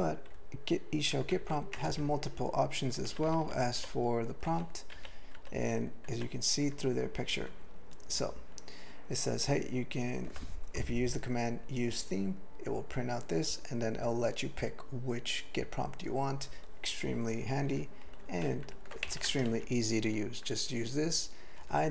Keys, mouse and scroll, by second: 0.3-1.0 ctrl+n, 1.9 ctrl+o, 3.1 ctrl+v, 3.3 ctrl+v, 3.5 ctrl+v, 3.8 ctrl+v, 4.5 ctrl+v, 6.1 ctrl+v, 6.7 ctrl+n, 7.2 ctrl+n, 7.5 ctrl+n, 17.7 q, 18.5 ctrl+n, 18.6 ctrl+n, 19.0 alt+m, 19.3 ctrl+space, 19.5 ctrl+alt+f, 21.6 ctrl+g, 21.8 ctrl+n.